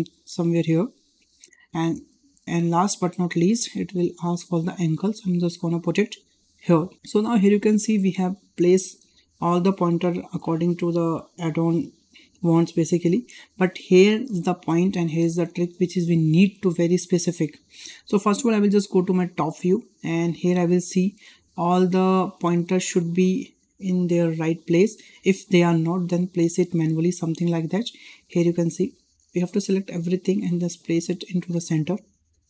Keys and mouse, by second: 1.3 shift+middle click, 2.2 shift+middle drag, 3.3-6.7 drag, 7.0 shift+middle drag, 7.5 shift+middle drag, 20.3 shift+middle click, 21.9 shift+middle drag, 22.4-22.7 drag, 24.2 click, 24.9 drag, 25.9 click, 26.1-27.7 drag, 28.5 shift+middle click, 29.3 click, 30.7-32.2 drag.